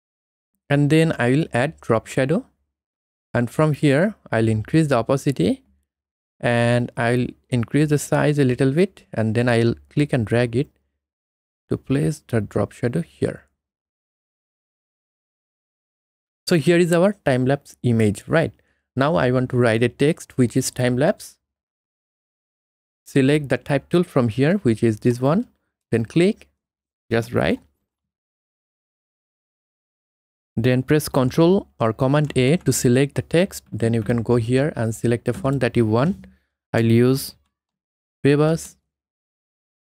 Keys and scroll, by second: 36.8-38.1 typing.